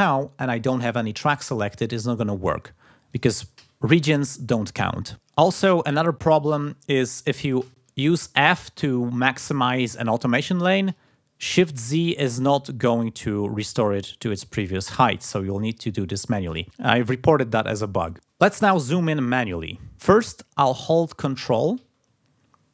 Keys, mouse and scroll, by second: 3.1 click, 3.5 f, 5.1 click, 6.2 click, 7.6 f, 10.8 shift+z, 13.2 scroll down 2, 14.3-16.3 drag, 16.3 8, 16.6 scroll up 2.